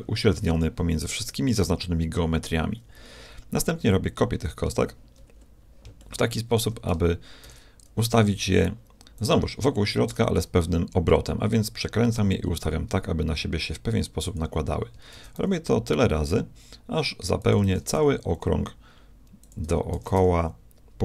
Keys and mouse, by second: 7.4 shift+d, 7.6 middle click, 15.2 shift+d, 17.7 shift+d, 20.0 shift+d.